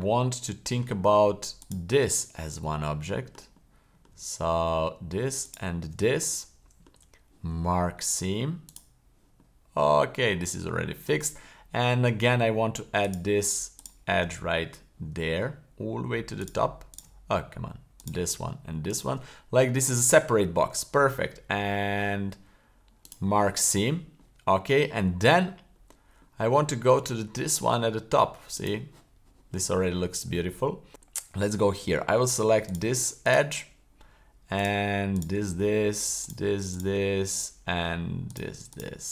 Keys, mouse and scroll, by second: 0.0 middle click, 1.6 alt+shift+right click, 2.1-3.3 middle drag, 3.6-4.0 middle drag, 5.4 alt+shift+right click, 6.0-6.9 middle drag, 7.0 w, 9.4-10.2 middle drag, 10.6-10.9 middle drag, 11.5-12.3 middle drag, 13.0 right click, 13.8 shift+right click, 14.3 middle click, 14.7 scroll up 2, 16.4 shift+right click, 16.9 shift+right click, 18.0 right click, 18.9 shift+right click, 19.9 middle click, 20.6 w, 23.7-24.2 scroll down 2, 24.2-25.3 middle drag, 25.6-26.2 scroll down 2, 26.2 middle click, 26.7 scroll down 1, 28.5 click, 30.9 middle click, 32.7 right click, 33.2 shift+right click, 34.5 shift+right click, 35.1 shift+right click, 35.5-36.1 middle drag, 36.2 shift+right click, 36.7 shift+right click, 37.1-37.9 middle drag, 38.7 shift+right click.